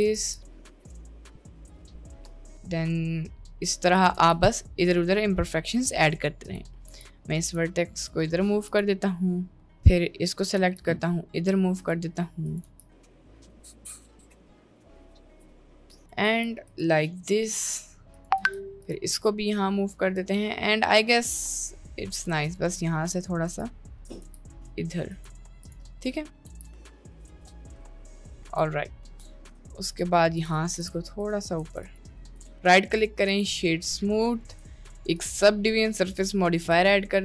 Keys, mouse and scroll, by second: 0.1 click, 0.7 g, 1.3 g, 1.8 g, 2.5-3.2 right drag, 4.3 g, 5.8 middle click, 7.0 g, 7.8 middle click, 9.7 middle click, 10.7 g, 12.5 click, 12.7 g, 13.3 click, 13.5 g, 13.7 middle click, 14.3 g, 15.1 g, 15.8 middle click, 16.4 g, 17.4 middle click, 18.1 click, 18.5 g, 19.3 middle click, 20.2 Tab, 20.5-22.3 middle drag, 22.3 Tab, 24.3 g, 26.0 middle click, 26.6 g, 27.6 g, 27.8 g, 28.0 middle click, 28.4 Tab, 28.4 g, 28.8 middle click, 29.2 middle click, 29.6 Tab, 30.7 g, 31.8 Tab, 32.2 middle drag, 32.9 right click, 33.7-34.2 middle drag, 35.2-36.9 drag.